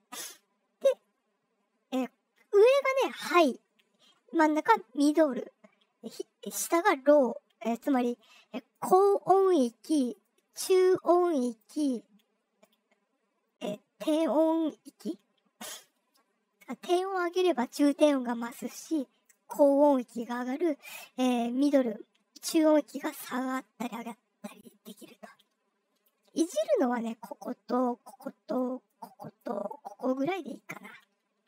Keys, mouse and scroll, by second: 0.8-1.9 drag, 8.7 click, 10.2-11.5 drag, 12.6-18.6 drag, 19.2-20.1 drag, 20.8-24.8 drag, 25.3 click, 26.7-27.3 drag, 27.7 click, 28.8 click, 29.6-30.7 drag, 30.9 click.